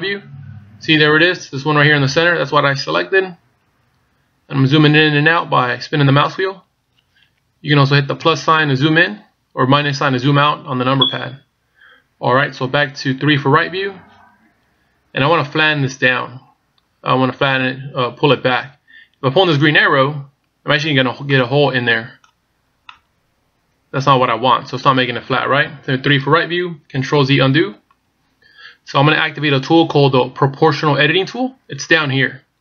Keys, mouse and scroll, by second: 0.0 KP_1, 2.1-3.4 scroll up 16, 3.4-4.2 scroll down 12, 4.4-4.8 scroll up 3, 4.8-5.2 scroll down 4, 5.4-5.8 scroll up 3, 5.8 scroll down 1, 5.9-7.4 scroll down 6, 8.3 KP_Add, 8.4 KP_Add, 10.1 KP_Subtract, 10.2 KP_Subtract, 13.6 KP_3, 19.8 click, 21.3 middle click, 22.5 scroll up 2, 22.9 middle click, 26.0 KP_3, 27.5 ctrl+z.